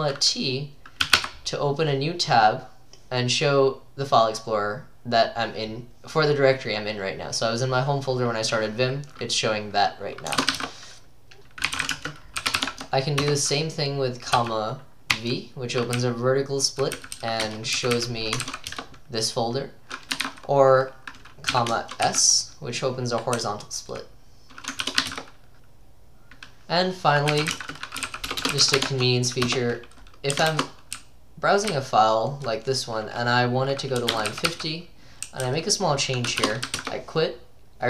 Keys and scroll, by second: 1.0-1.7 typing, 10.3-12.6 typing, 12.7 Tab, 13.2 Return, 14.1-18.9 typing, 18.7 Return, 20.0-22.1 typing, 23.4-25.1 typing, 27.1-37.3 typing, 29.5 Return.